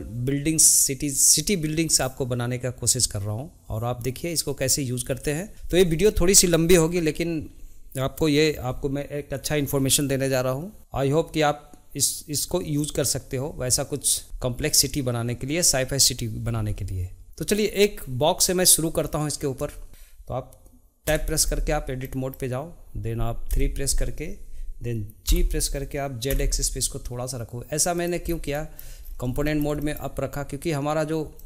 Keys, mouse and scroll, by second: 0.2 shift+middle click, 0.3 click, 0.4 scroll down 1, 0.4 click, 0.5 shift+middle click, 1.0 click, 1.1 shift+d, 1.2 shift+middle click, 1.3 click, 1.4 shift+middle click, 1.4-2.0 scroll up 11, 1.6 shift+middle click, 1.7 shift+d, 1.8 shift+middle click, 1.8 click, 2.0 scroll down 1, 2.1 shift+middle click, 2.2 ctrl+right click, 2.3 shift+middle click, 2.5 click, 2.7 shift+middle click, 2.8 shift+middle click, 3.1 shift+middle click, 3.2-3.8 scroll down 2, 3.3 shift+middle click, 3.4 click, 3.6 shift+middle click, 3.8 shift+middle click, 3.9 scroll up 3, 4.0 click, 4.4 click, 4.7 shift+middle click, 4.9 scroll up 4, 5.1 Tab, 5.1 a, 5.9 shift+middle click, 6.1 click, 6.3 shift+middle click, 6.5 scroll up 3, 6.7-7.2 scroll down 2, 6.8 middle click, 6.9 click, 7.0 shift+d, 7.2 shift+middle click, 7.3 click, 7.4 shift+middle click, 7.5 shift+middle click, 7.7 click, 7.8 click, 7.9 scroll up 5, 8.0 shift+middle click, 8.1 click, 8.2 shift+middle click, 8.5 shift+middle click, 8.6 ctrl+right click, 8.7 click, 8.8 shift+middle click, 9.0 shift+middle click, 9.5 click, 9.6 scroll down 1, 9.6 shift+middle click, 9.9 click, 10.0 shift+middle click, 10.1 click, 10.2 shift+middle click, 10.8 shift+z, 10.8 click, 10.9 shift+middle click, 11.0 g, 11.3 scroll up 3, 11.4 shift+middle click, 11.6 Tab, 11.7 scroll down 1, 11.7 click, 11.8 shift+middle click, 11.9 shift+middle click, 12.0 scroll up 1, 12.2 scroll down 1, 12.2 shift+middle click, 12.6 click, 13.1 click, 13.3 shift+middle click, 13.5 click, 13.5 scroll up 1, 13.6 shift+middle click, 13.7 Tab, 14.2 shift+middle click, 14.6 shift+middle click, 14.7 3, 14.7 alt+click, 15.1 alt+shift+click, 15.2 alt+e, 15.9 ctrl+z, 16.1 alt+e, 16.8 click, 17.2-19.4 shift+middle drag, 22.0-23.5 middle drag, 23.5 KP_3, 28.2 scroll down 1, 28.5-29.0 middle drag, 29.0-29.4 scroll up 1, 29.4-31.4 shift+middle drag.